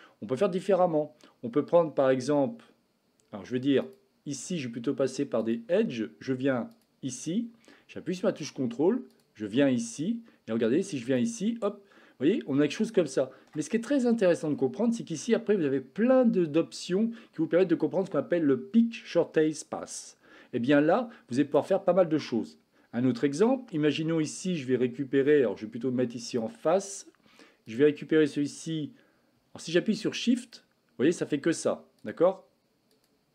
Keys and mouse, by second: 3.7 click, 5.4-6.8 drag, 9.0 ctrl+click, 26.2 click.